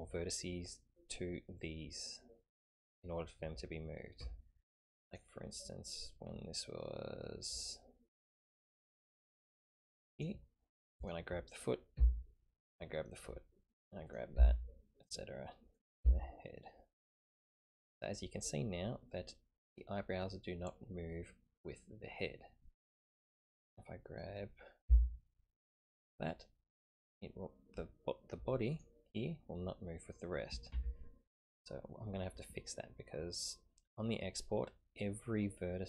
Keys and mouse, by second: 4.2 Tab, 5.1 click, 8.1 click, 9.4-10.2 drag, 11.0 click, 11.9 g, 14.0-14.3 typing, 14.1 click, 15.7 click, 16.0 g, 23.4 click, 24.9 g, 30.9 ctrl+z.